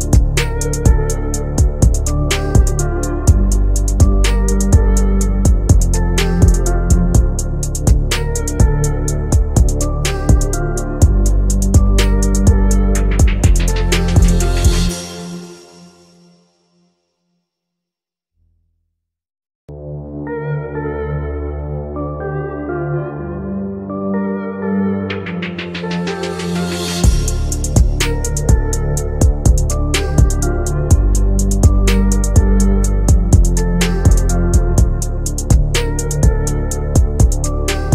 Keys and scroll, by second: 5.1 ctrl+z, 13.8 Delete, 30.1 Delete.